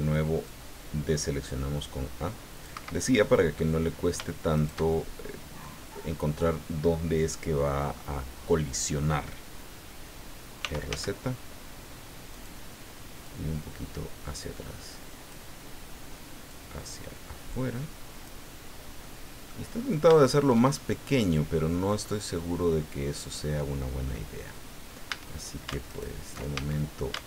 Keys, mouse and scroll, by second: 0.4-2.8 drag, 2.7 Escape, 3.0 click, 3.8 scroll up 2, 4.5 shift+right click, 4.9 shift+click, 5.8 scroll down 2, 6.1-7.1 drag, 10.6 r, 10.9 z, 12.3 click, 13.2-15.5 drag, 16.5-18.4 drag, 18.7-19.0 scroll up 2, 19.0 middle click, 19.7-20.0 scroll up 2, 20.2 shift+middle click, 20.8-21.9 shift+middle drag, 22.0-24.0 middle drag, 24.0 scroll up 1, 25.1 a, 25.9 alt+shift+right click, 26.5 alt+shift+a.